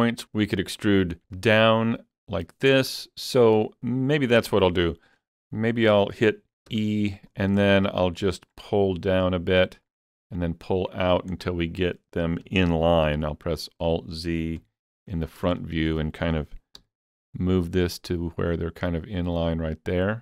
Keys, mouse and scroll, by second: 1.0 shift+click, 1.5 shift+click, 2.3 middle click, 4.0-6.2 middle drag, 6.7 e, 7.2 click, 8.3 middle click, 9.4 click, 10.7 click, 11.4 middle click, 12.4 KP_3, 13.2 alt+z, 13.6 scroll up 2, 14.6 KP_1, 15.3 scroll up 3, 15.6 shift+middle click, 16.8 g.